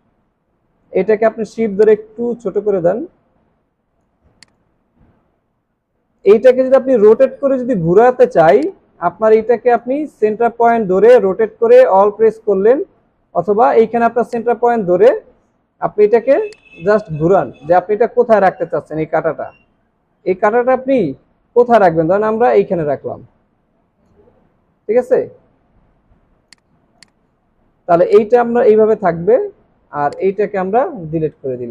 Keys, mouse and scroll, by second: 1.8 shift+click, 16.5 alt+click, 31.0 Delete.